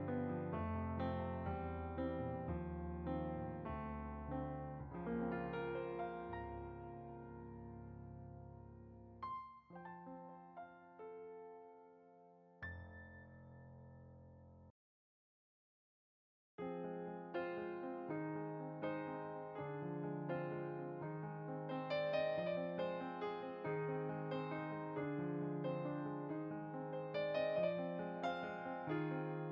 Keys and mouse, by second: 0.8 middle click, 1.2 shift+click, 1.8 middle click, 2.9 click, 5.0 middle click, 5.2 middle click, 5.6 click, 5.8 middle click, 6.7 click, 9.0 shift+click, 9.7 middle click, 10.3 shift+click, 11.3 middle click, 12.1 shift+click, 12.9 middle click, 13.4 shift+click, 14.3 middle click, 14.7 shift+click, 15.4 middle click, 15.8 shift+click, 17.0 middle click, 17.9 g, 18.2 click, 21.6 middle click, 22.4 shift+click, 24.7 middle click, 26.3 click, 28.1 middle click, 28.6 shift+click.